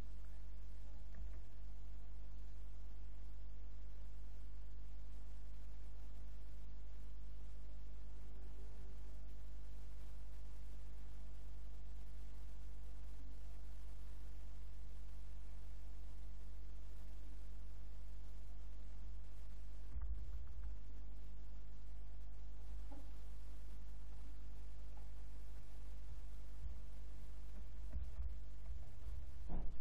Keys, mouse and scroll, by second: 1.2 shift+a, 7.4 click, 10.4 middle click, 12.1 middle click, 13.2 middle click, 14.9-16.1 middle drag, 16.1-18.0 right drag, 19.0 Tab, 19.9 BackSpace, 20.1-20.6 BackSpace, 21.6 Tab, 22.7 Tab, 26.6 b, 27.9-29.2 typing.